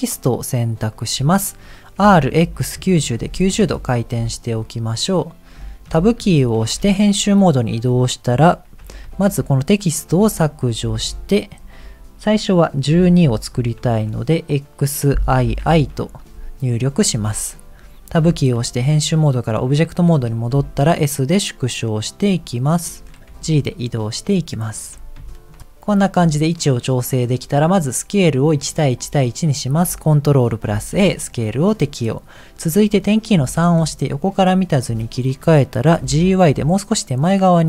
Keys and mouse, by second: 2.1 r, 5.6 shift+middle click, 6.2 Tab, 9.0 BackSpace, 9.0 BackSpace, 10.1 BackSpace, 13.9 shift+x, 15.4 shift+i, 15.6 shift+i, 18.1 Tab, 20.5 s, 23.3 g, 25.3 shift+middle click, 26.8 middle click, 30.7 ctrl+a, 33.3 KP_3, 35.0 shift+middle click, 36.0 g.